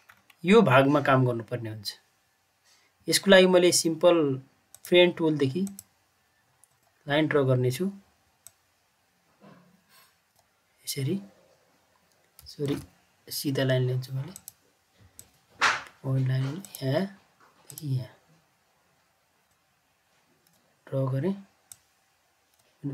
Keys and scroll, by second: 12.6 ctrl+z.